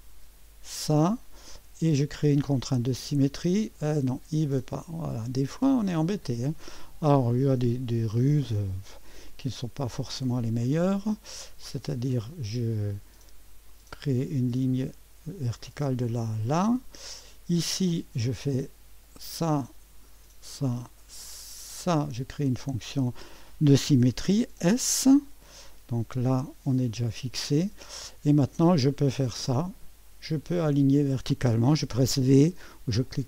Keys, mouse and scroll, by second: 0.7 click, 2.9 click, 4.7 click, 7.3 click, 9.2 click, 13.7 click, 15.6 click, 16.5 middle click, 16.8 middle click, 19.1 click, 20.5 click, 21.7 click, 24.5 s, 26.4-27.9 drag, 29.6 click, 30.9 click, 32.9-33.2 typing.